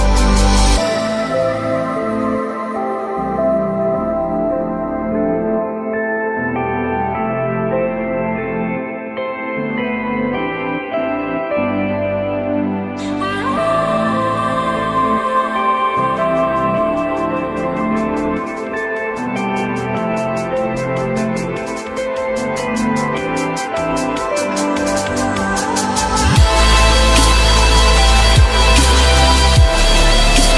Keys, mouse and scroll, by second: 0.5 4, 2.2 Return, 3.6 alt+middle click, 6.3 F3, 6.8 F3, 11.1 alt+middle click, 13.3 alt+middle click, 13.5 alt+double middle click, 15.5 alt+middle click, 16.2 alt+double middle click, 18.4 j, 18.9 ctrl+click, 19.9 F3, 20.6 F3, 21.6 F4, 26.7 v, 27.1 Return.